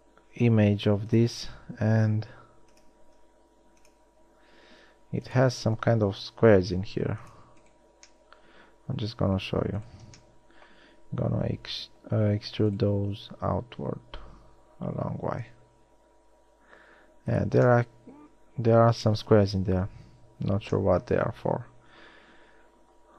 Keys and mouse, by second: 3.4 ctrl+r, 6.8 ctrl+Tab, 11.8 w, 12.6 e, 13.3 s, 20.2 Tab.